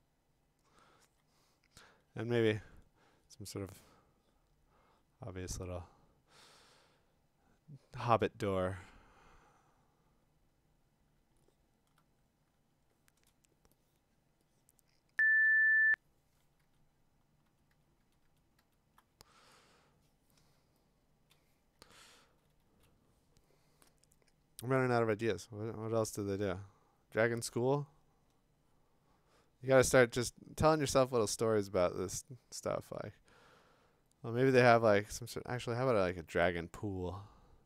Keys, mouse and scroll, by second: 1.0 x, 11.9-15.4 alt+click, 13.9 alt+click, 14.2-15.2 click, 15.3 click, 15.4 click, 16.6 alt+Tab, 17.5 alt+Tab, 17.7 alt+Tab, 18.0 alt+Tab, 18.3 alt+Tab, 18.6 alt+Tab, 21.3 click, 22.3 [, 22.6 [.